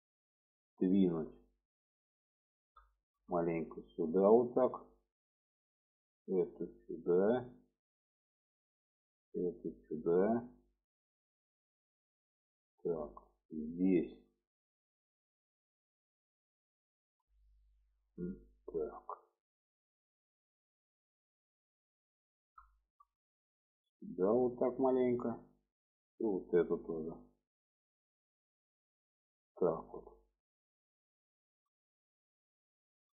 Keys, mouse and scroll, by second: 2.1 alt+middle click, 3.0 shift+middle click, 4.2-5.6 drag, 6.4 click, 7.1-8.5 drag, 9.2 click, 10.0 click, 11.1 shift+middle click, 12.2 middle click, 13.4 middle click, 14.2 shift+middle click, 18.3 KP_Decimal, 20.2-21.3 middle drag, 21.9 alt+middle click, 22.9 shift+middle click, 23.7 click, 24.7 middle click, 26.5 click, 26.8-27.8 middle drag, 28.9 click, 30.5 click, 31.4 shift+middle click, 32.8 shift+middle click.